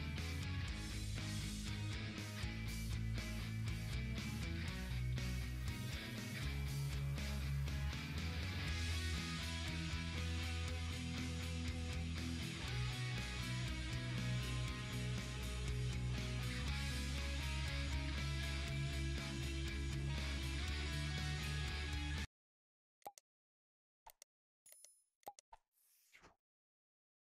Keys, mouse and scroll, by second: 4.4-6.1 drag, 6.1 Down.